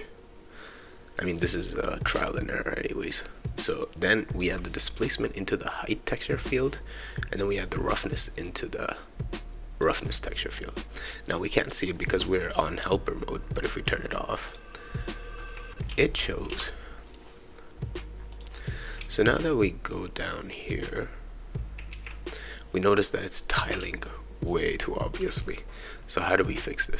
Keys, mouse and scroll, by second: 4.4-6.5 drag, 7.6-10.0 drag, 11.6 click, 13.6 click, 14.4 click, 15.0-17.7 right drag, 15.9 w, 16.5 s, 18.3 click, 18.6-25.2 right drag, 19.0 q, 21.6 q, 23.5 w, 24.1 e.